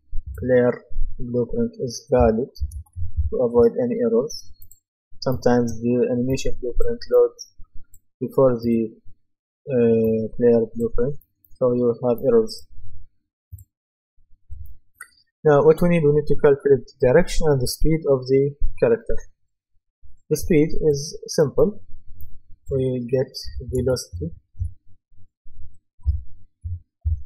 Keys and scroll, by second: 2.4-3.4 typing, 23.2-26.6 typing.